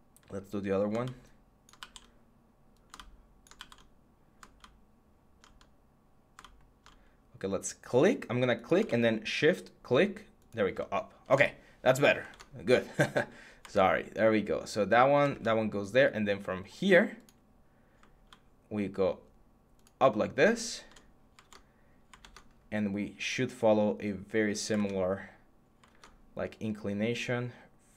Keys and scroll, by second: 0.0 Tab, 1.6 ctrl+z, 3.4 ctrl+z, 11.0 alt+Tab, 12.1 alt+Tab, 13.4 alt+Tab, 15.1 Tab, 21.2 Tab, 22.0 Tab, 24.5 Tab, 25.7 Tab.